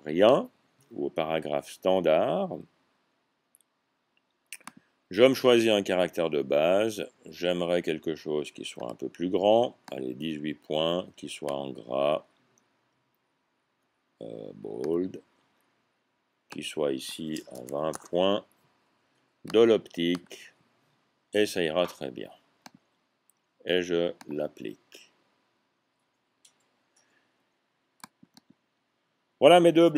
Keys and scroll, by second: 17.4-17.8 typing, 19.6 typing.